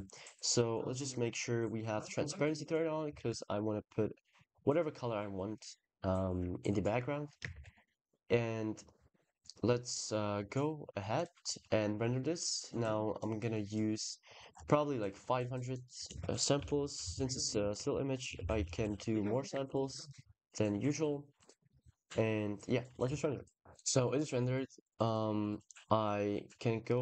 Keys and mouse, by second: 1.9 click, 3.0 ctrl+s, 7.4 ctrl+s, 13.6 click, 15.8-18.6 shift+drag, 17.1 shift+/, 17.6 shift+BackSpace, 19.5 ctrl+s, 23.0 ctrl+s, 23.4 drag.